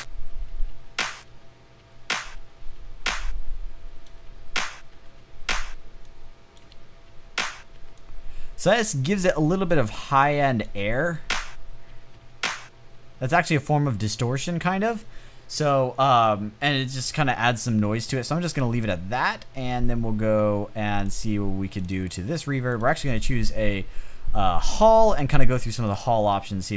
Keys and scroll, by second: 1.3 space, 1.9 space, 3.7 space, 4.4 space, 6.1 space, 7.2 space, 10.5 space, 11.4 space, 11.6 space, 14.1 space.